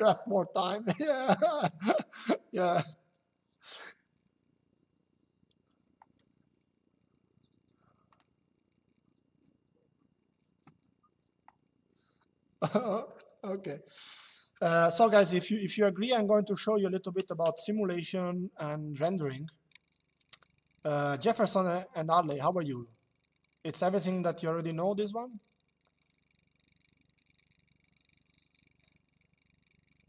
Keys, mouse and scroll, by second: 7.8 click.